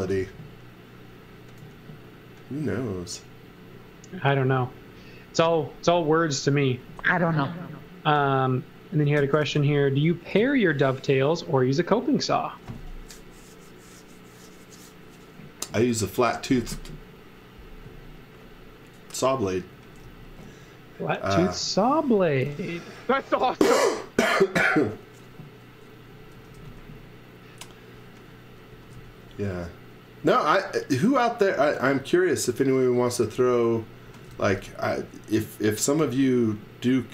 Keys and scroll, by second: 0.0-1.6 typing, 8.9-10.3 typing, 19.7 x, 20.0 v, 26.0-27.0 typing, 28.4-29.4 typing, 30.7 r, 33.8-34.8 typing, 36.0 t.